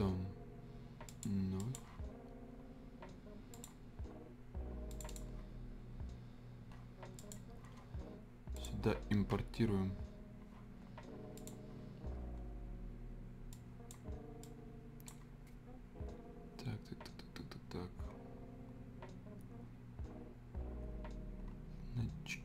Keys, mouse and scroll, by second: 1.0 click, 10.7-11.3 scroll up 1, 11.3-17.7 drag, 21.4-22.4 scroll up 1.